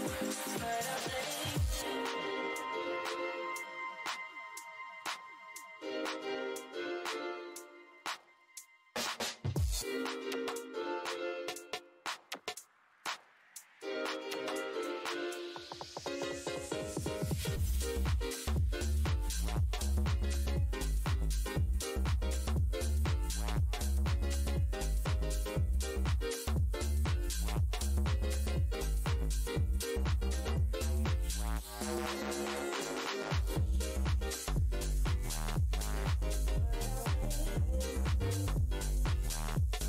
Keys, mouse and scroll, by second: 0.4 click, 0.9 shift+x, 2.2 x, 3.1 click, 7.0 z, 7.7 click, 8.2 right click, 8.5 click, 11.8 right click, 12.3 alt+click, 14.4 w, 15.4 alt+click, 17.4 shift+right click, 18.4 alt+click, 18.5 alt+w, 18.7-20.9 typing, 23.4 r, 25.9 z, 26.9 click, 27.2 Tab, 27.7 8, 27.9 Return, 29.5-30.3 typing, 30.5-31.3 scroll up 1, 31.3 click, 32.8 shift+d, 33.1 shift+x, 34.0 space, 34.5 f, 35.0 alt+scroll down 1, 35.9 shift+click, 36.1 alt+scroll down 1, 37.0 `, 37.9 `.